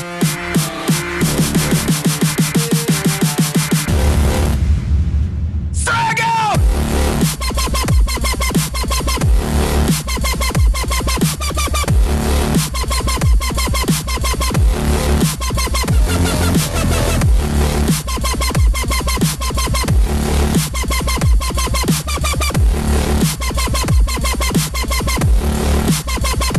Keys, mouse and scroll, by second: 0.9 KP_Decimal, 2.1-2.6 scroll down 5, 3.9 ctrl+r, 7.5 r, 11.7 s, 13.6-16.5 middle drag, 18.2-21.4 drag, 21.4 ctrl+x, 24.7-25.2 scroll down 3, 25.2-26.3 middle drag, 26.3 KP_7.